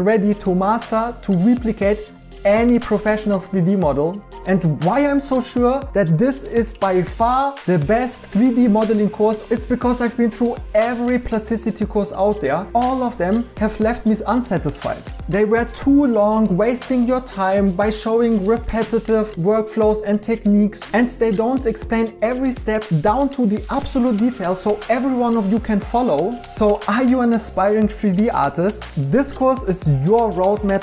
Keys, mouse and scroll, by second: 0.0-0.4 typing, 1.0 alt+h, 1.0 right click, 1.9 right click, 2.7 right click, 3.1 right click, 4.1 right click, 29.4-30.8 typing.